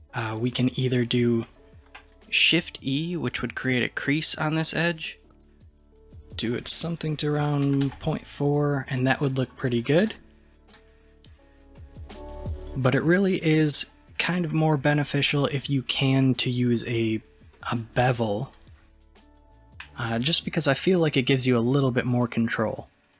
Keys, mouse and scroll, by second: 2.8 shift+e, 9.0 middle click, 9.8 click, 10.1-17.4 middle drag, 17.6-23.1 middle drag.